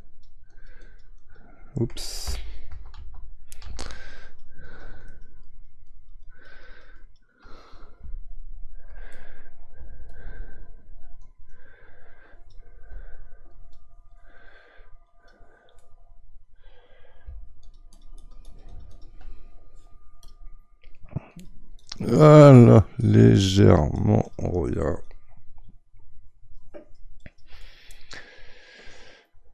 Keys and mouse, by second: 2.7 ctrl+z, 3.0 ctrl+z, 3.6 ctrl+z, 4.2-9.1 drag, 9.1 middle click, 10.1-15.8 shift+drag, 15.8-17.6 middle drag, 17.6-27.6 shift+drag, 27.6-29.5 middle drag.